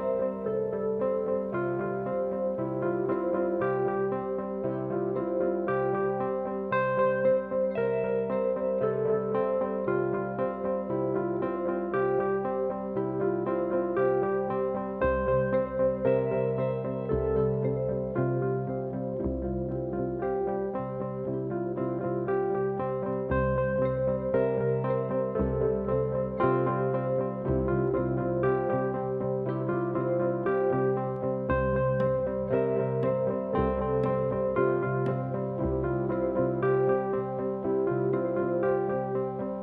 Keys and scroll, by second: 2.0 ], 3.9 4, 5.2 3, 5.8 ], 8.3 ], 10.4 ], 11.1 4, 12.5 3, 20.0 ctrl+z, 22.3 4, 23.0 shift+i, 31.8 F1, 31.9 F2, 36.1 ctrl+z, 37.5 4, 39.0-39.6 typing.